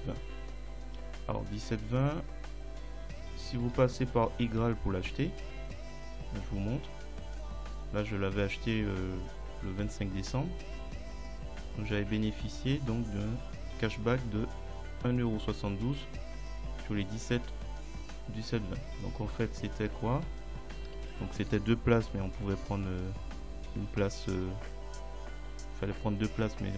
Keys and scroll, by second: 20.9 =.